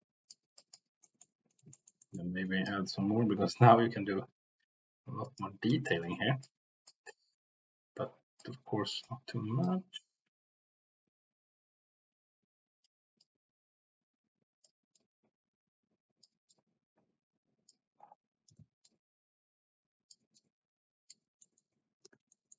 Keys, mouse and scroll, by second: 0.6 middle click, 1.0 middle click, 1.7 shift+middle click, 2.0 middle click, 3.9-5.3 drag, 5.9 ctrl+z, 6.4 click, 8.4 click, 8.8 c, 9.6 middle click, 9.9-12.8 drag, 13.1-14.6 drag, 14.9-16.3 drag, 16.4-17.8 middle drag, 18.6 ctrl+z, 18.9-20.1 drag, 20.3 click, 21.4 middle click, 22.1 ctrl+z, 22.4 middle click.